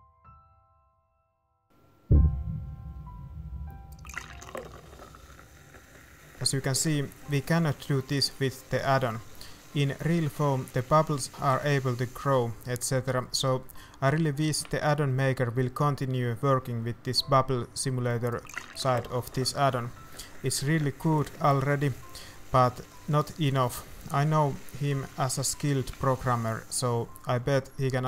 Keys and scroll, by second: 0.3 ctrl+s, 1.1 ctrl+s, 1.4 shift+z, 1.7 shift+z.